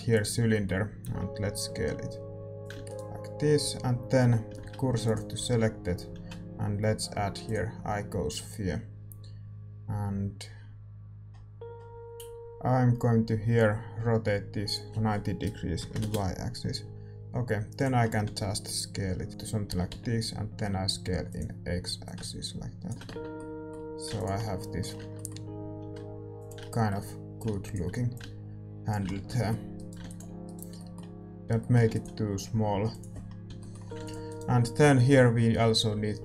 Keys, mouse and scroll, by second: 0.1 shift+a, 1.0-2.2 middle drag, 1.0 s, 2.6-5.1 drag, 2.6-5.1 middle drag, 2.7 a, 2.8-5.1 right drag, 5.1 shift+s, 5.3 a, 7.5 shift+a, 11.0 scroll down 1, 11.3-14.6 scroll up 1, 14.6-16.0 scroll up 1, 16.0-17.1 drag, 17.1 s, 17.9-19.3 middle drag, 18.2 s, 19.3 s, 19.7 s, 22.0-24.3 drag, 23.0 Tab, 23.1-24.3 middle drag, 24.3 ctrl+s, 24.9 Tab, 25.6 s, 27.3-30.4 drag, 29.1 Tab, 29.2 middle click, 29.7-32.9 right drag, 30.4 ctrl+s, 32.9 ctrl+s, 32.9-36.2 drag, 33.4 a, 33.5 middle click, 34.2 ctrl+s, 34.2-36.2 right drag.